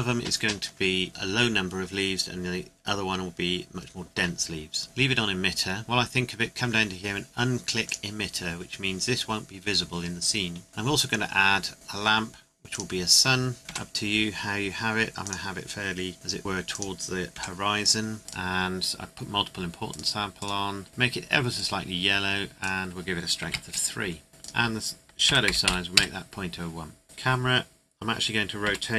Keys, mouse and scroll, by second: 5.5-7.0 scroll down 1, 7.8 click, 10.7 shift+a, 12.7 click, 13.6 middle click, 13.7 r, 15.2 click, 16.1 g, 16.7 click, 17.3 r, 17.8 click, 23.4 KP_3, 23.5 KP_Enter, 24.4 click, 25.3 KP_Decimal, 25.5 KP_0, 25.6 KP_1, 25.9 KP_Enter, 27.0 KP_0, 28.6 r.